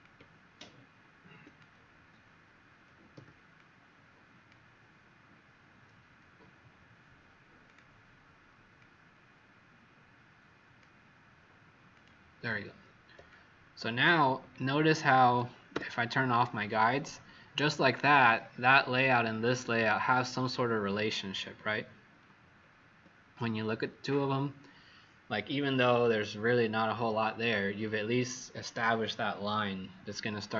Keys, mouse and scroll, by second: 3.1 z, 3.5 click, 13.2 click, 14.5-14.8 scroll down 2, 15.7 alt+w, 18.3-19.8 scroll up 9, 20.5-20.9 scroll down 3, 21.3-22.0 scroll down 3, 22.5 alt+scroll down 1.